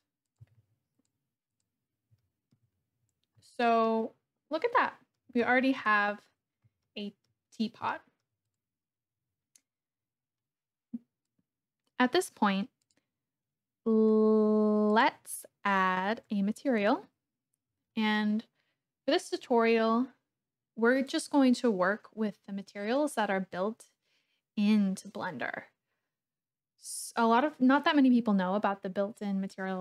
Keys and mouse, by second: 0.3 click, 0.4 g, 0.6 z, 0.9 click, 1.5 click, 2.2 shift+click, 3.5 shift+click, 3.9-5.2 drag, 5.8 KP_1, 6.8 shift+click, 7.2 shift+middle click, 7.9 shift+middle click, 8.5 middle click, 12.8 middle click, 14.9 click.